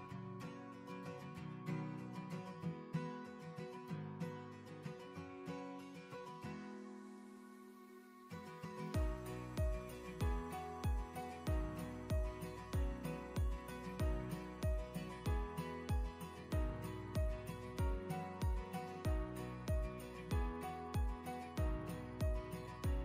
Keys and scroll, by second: 4.3 ctrl+j, 5.8 Delete.